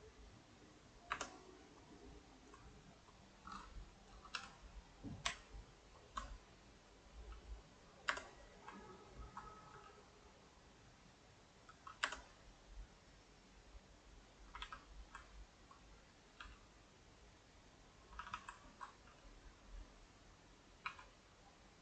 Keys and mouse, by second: 1.9 click, 2.8 right click, 4.4 g, 9.2 ctrl+right click, 9.8 g, 12.7-14.5 middle drag, 14.5 a, 14.6 a, 14.8 middle click, 15.5 ctrl+Right, 15.7 middle click, 16.4 g, 17.7 middle click, 18.1 a, 18.3 a, 18.8 ctrl+Right, 19.1 g, 20.9 r.